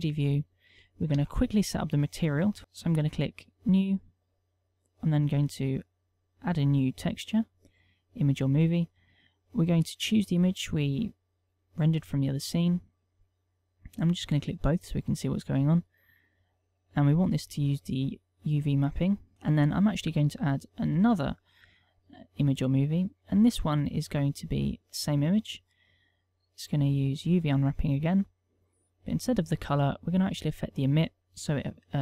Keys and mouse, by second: 0.8 click, 2.0 Tab, 3.4 click, 4.2 click, 5.8 click, 7.0 click, 8.0 click, 9.6 middle click, 10.4 click, 12.9 middle click, 14.8 click, 16.0 middle click, 18.0 click, 20.7 click, 21.6 click, 22.4 click, 25.4 click, 26.6 middle click, 27.6 click, 28.6 middle click, 30.0 click, 30.9 click, 31.5 click.